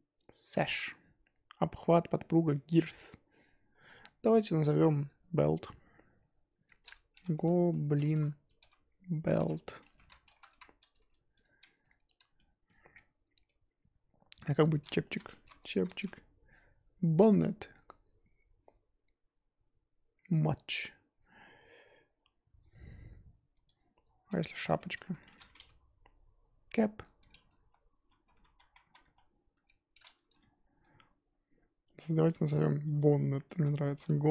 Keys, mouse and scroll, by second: 4.6-11.0 drag, 12.0-12.3 scroll down 1, 12.3-32.9 shift+middle drag, 33.0-34.3 drag.